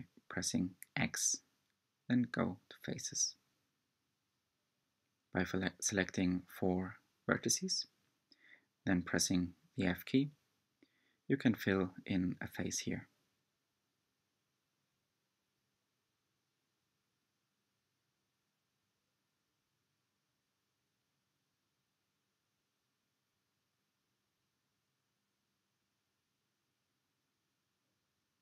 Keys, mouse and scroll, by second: 0.0 shift+click, 0.5-2.0 middle drag, 2.0-3.0 scroll up 3, 3.0 shift+click, 4.3 x, 6.8-8.5 middle drag, 8.5 1, 9.7 click, 10.4 shift+click, 11.8 shift+click, 12.6 shift+click, 13.0 f, 15.7 shift+click, 17.6 f, 18.6 click, 19.7 shift+click, 20.1-22.6 middle drag, 23.1-24.6 middle drag, 24.6 shift+click, 25.1 f, 26.0 click, 27.1 shift+click, 27.7 shift+click.